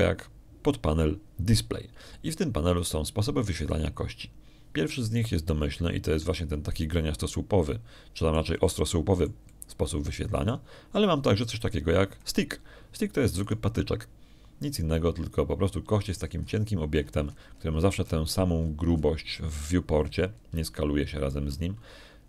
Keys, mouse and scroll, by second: 1.3 scroll up 1, 8.2-12.5 drag, 14.0 middle click, 15.3 middle click, 17.9-18.2 scroll up 1, 18.8-20.1 scroll down 1, 20.5 scroll up 1, 21.9 middle click.